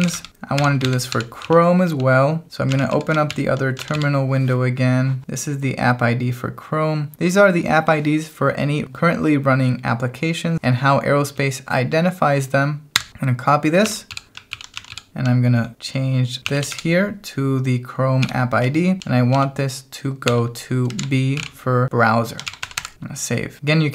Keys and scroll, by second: 0.0-2.9 typing, 2.7 ctrl+a, 3.3 ctrl+j, 3.8 ctrl+a, 3.9 m, 13.0 y, 13.8 ctrl+a, 14.1 m, 14.5 ctrl+k, 14.9 m, 15.3 h, 16.5 i, 18.2-23.1 typing.